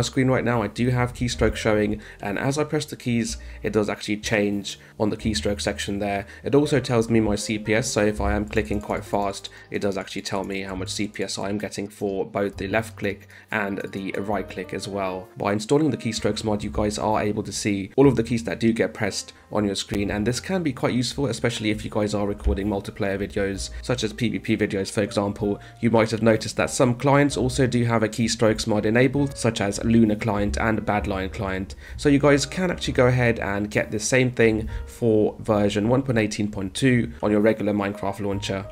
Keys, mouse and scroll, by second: 0.4-5.4 typing, 8.3 click, 8.5 click, 8.6 click, 8.8 click, 9.0 click, 9.1 click, 9.8 click, 10.5 click, 10.7 click, 10.9 click, 11.0 click, 11.2 click, 11.4 click, 12.4 right click, 13.3 click, 13.9 click, 15.5 space, 18.1 a, 18.4 d, 22.2 space, 23.7 a, 25.4 d, 27.3 a, 29.6 space, 31.6 d, 34.3 d, 37.1 a, 38.5 space.